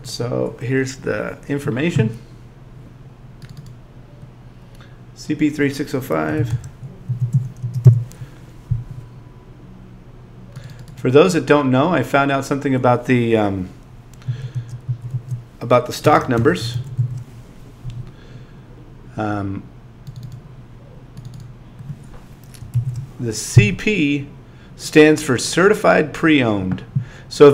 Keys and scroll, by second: 14.3 2, 22.7 shift+l.